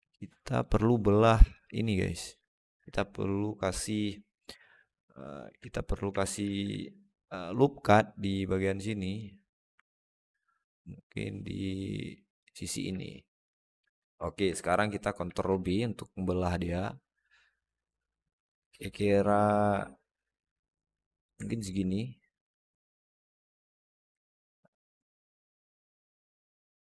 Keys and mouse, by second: 5.6 alt+middle click, 6.3 ctrl+r, 12.8 alt+middle click, 13.5 alt+shift+middle click, 13.7 alt+middle click, 15.1 ctrl+b, 21.3 middle click, 21.9-23.6 drag, 24.1 alt+middle click, 25.3 alt+z, 25.6 alt+middle click.